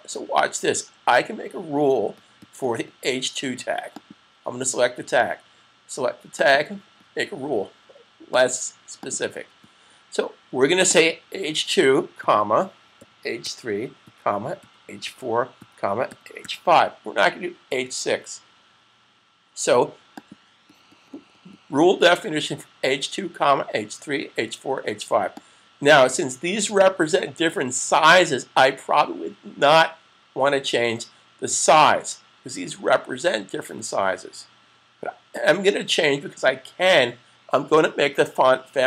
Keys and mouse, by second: 3.9 click, 6.2 click, 18.3 typing, 19.8 click, 25.0 click, 35.1 click.